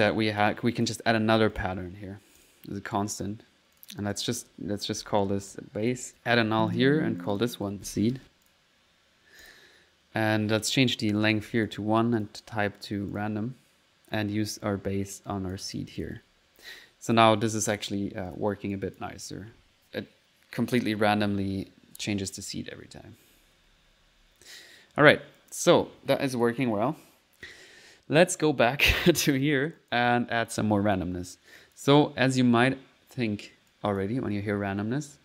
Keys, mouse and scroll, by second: 0.8 click, 1.6 click, 2.4 click, 3.8 click, 6.1 click, 6.5 alt+n, 6.8 alt+click, 7.3 alt+click, 9.5 click, 11.2 click, 12.2 click, 13.2 click, 14.2 click, 14.6-15.7 drag, 15.7 click, 16.2-17.3 typing, 18.3 click, 18.8 click, 19.4 click, 19.4-25.3 typing, 25.1 middle click, 25.4 click, 26.5 click, 26.9 click, 28.2 middle click, 29.8 click, 30.5 click, 31.3 click.